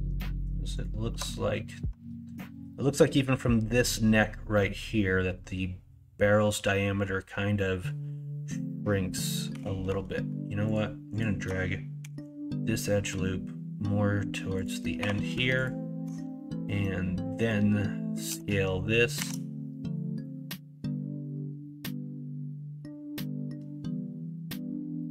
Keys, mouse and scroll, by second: 9.5 2, 12.0 g, 15.0 3, 18.2 s.